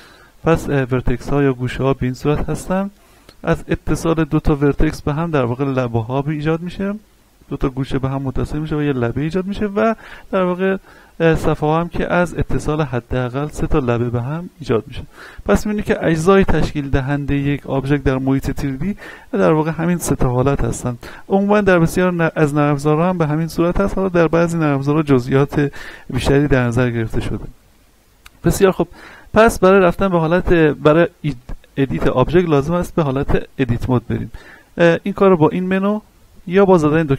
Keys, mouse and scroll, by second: 2.4 right click, 3.5 click, 4.5 right click, 10.2 click, 10.7 middle click, 11.5 right click, 13.5-24.3 middle drag, 29.7 click, 35.5 click.